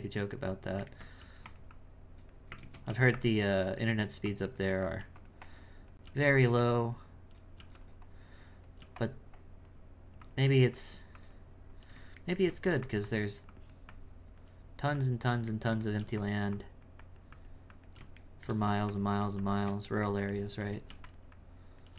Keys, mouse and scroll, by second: 1.2 f, 1.7 click, 2.6 ctrl+z, 2.9 f, 3.6-5.0 drag, 5.0 f, 5.4 click, 6.1 f, 6.6-7.6 drag, 7.6 f, 8.0 click, 9.4-12.2 drag, 12.2 shift+middle click, 13.1-15.6 drag, 15.6 shift+middle click, 16.5-18.2 drag, 18.2 shift+middle click, 19.2 f, 20.0 shift+middle click, 21.3 click.